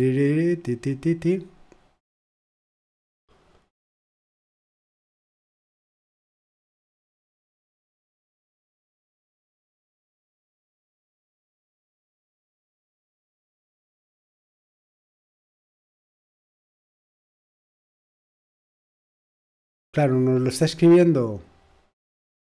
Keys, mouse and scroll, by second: 1.0-1.9 scroll down 2, 1.9-2.8 scroll down 1, 2.8-3.2 scroll down 1, 7.5-8.0 scroll down 2, 8.8-9.3 scroll down 1, 10.1-10.5 scroll down 1, 10.9-11.5 scroll down 1, 11.9-12.3 scroll down 1, 13.5-14.8 scroll down 2, 15.1-15.7 scroll down 1, 17.1-20.1 scroll up 1, 20.1-21.1 scroll up 1, 21.1-22.4 scroll up 1.